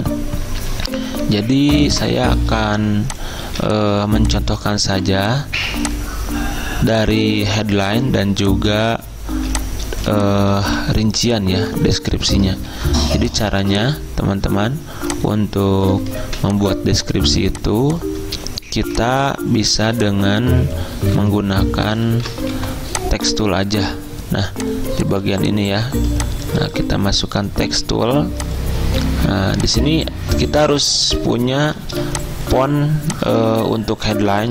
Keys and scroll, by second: 1.3 i, 3.5 z, 5.0 v, 9.4 z, 10.7 typing, 12.8 ctrl+d, 16.3 ctrl+z, 21.2 d, 22.2 ctrl+z, 22.6 g, 25.3 z, 27.8 t, 31.7 ctrl+z, 32.1 Return.